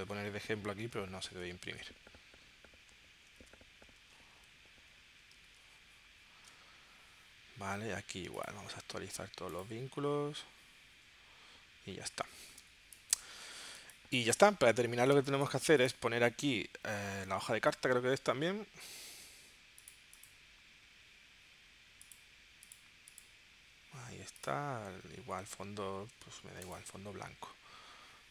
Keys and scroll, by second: 1.1 super+s, 3.2 super+w, 4.3 super+q, 5.5 super+Tab, 12.6 space, 13.8 space, 15.2 space, 18.3 super+d.